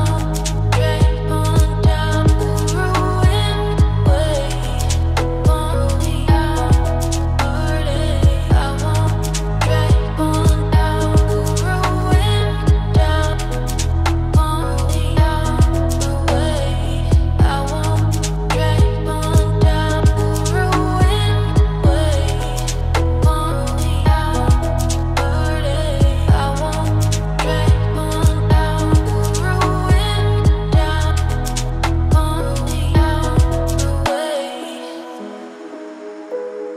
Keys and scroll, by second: 11.8 ctrl+alt+s, 24.1 ctrl+alt+s, 35.3 ctrl+space.